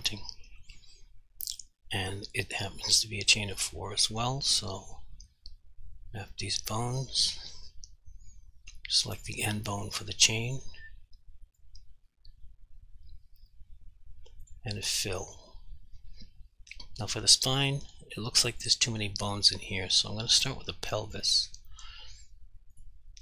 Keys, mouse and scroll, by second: 4.8 click, 9.2 click, 14.4 click, 18.6 click.